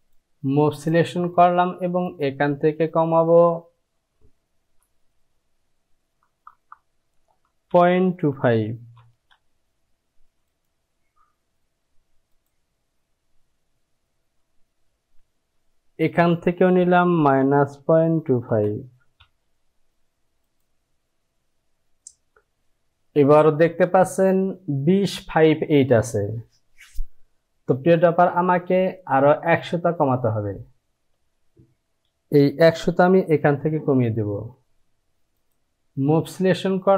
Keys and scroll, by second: 5.3 Down, 6.5 KP_0, 6.8 Down, 7.5 KP_Decimal, 8.3 KP_2, 15.0 Down, 15.6 Down, 17.2 KP_Subtract, 17.8 KP_Decimal, 18.2 KP_2, 19.2 KP_5.